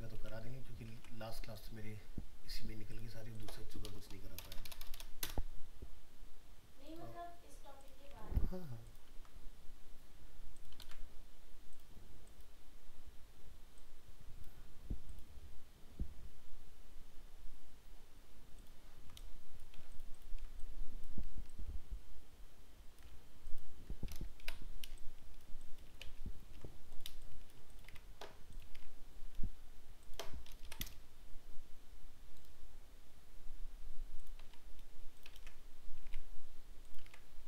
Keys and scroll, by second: 0.2 alt+Tab, 1.0 ctrl+Tab, 8.1 alt+Tab, 10.8 ctrl+v, 19.8 ctrl+space, 26.4 ctrl+-, 27.9 alt+Tab, 34.5 alt+Tab, 35.3 ctrl+v, 36.0 alt+Tab.